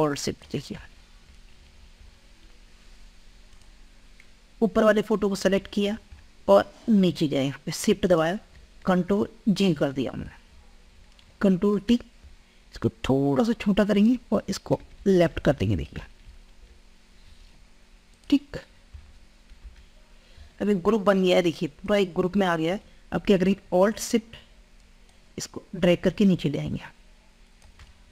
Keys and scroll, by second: 9.4 ctrl+g, 10.6 ctrl+g, 11.7 ctrl+t.